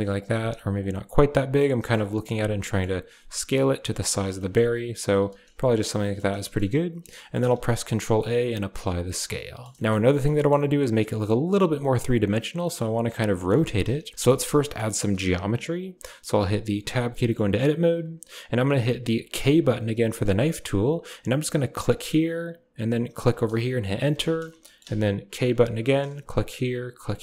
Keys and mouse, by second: 0.0-0.4 typing, 0.9-1.4 drag, 1.6 g, 2.5 drag, 3.3 click, 3.4 g, 4.3 click, 4.7 s, 5.1 g, 5.8 drag, 7.0 shift+middle click, 7.4 ctrl+a, 9.0-9.5 drag, 9.7 shift+click, 10.0 drag, 12.4 drag, 13.3 shift+drag, 13.9 KP_1, 14.5 shift+middle click, 16.5 Tab, 17.1 shift+click, 19.3 k, 24.6 shift+click, 25.2 k, 26.6 typing.